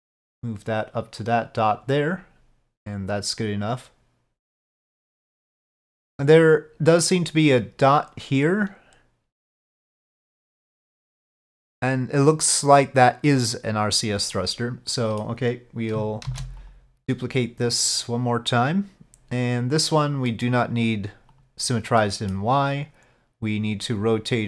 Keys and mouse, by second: 0.3-1.8 drag, 3.0-5.1 drag, 5.4-7.2 middle drag, 14.4-15.4 middle drag, 16.4 shift+d, 17.8-18.8 drag, 20.4 middle click, 21.4 click, 22.1 middle click.